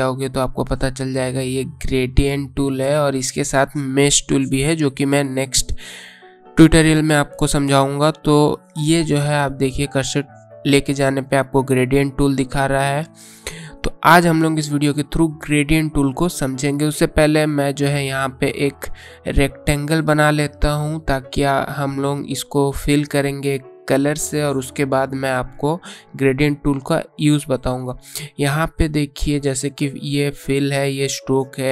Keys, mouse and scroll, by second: 0.5 right click, 7.7 click, 17.0 right click, 18.3 click.